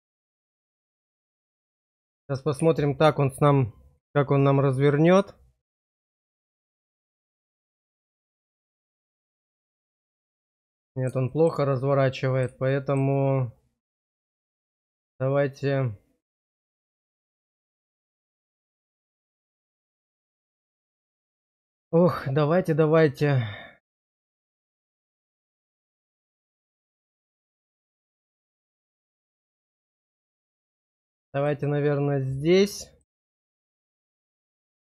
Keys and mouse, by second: 0.4 shift+middle click, 1.1 shift+middle click, 2.2 click, 6.6 click, 10.4 middle click, 11.3 shift+middle click, 11.7 middle click, 12.6 shift+middle click, 17.2-20.9 middle drag, 21.0 shift+middle click, 22.9-24.6 drag, 24.7 shift+click, 25.8 click, 26.6 shift+click, 28.5-30.1 drag, 31.5 click, 32.4 middle click.